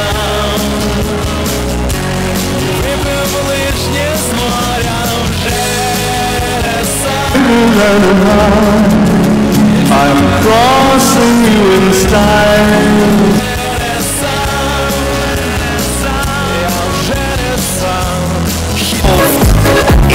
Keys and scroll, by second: 13.4 Page_Down.